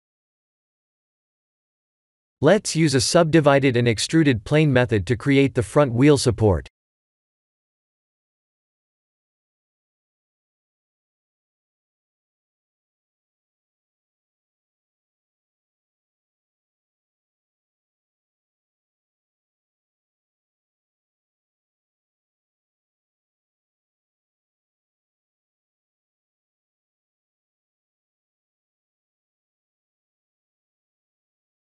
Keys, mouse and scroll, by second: 1.1-2.1 scroll down 2, 2.1 click, 3.5 shift+a, 8.5 ctrl+3, 10.1 s, 13.8 KP_1, 14.1 KP_7, 15.3 g, 16.9 scroll down 4, 18.0 middle click, 19.5 KP_3, 20.4 KP_1, 21.0-21.4 scroll up 5, 21.5 shift+z, 22.7 r, 24.1 g, 25.6 scroll down 3, 26.7 g, 28.1 e, 29.3 Tab, 30.1 e.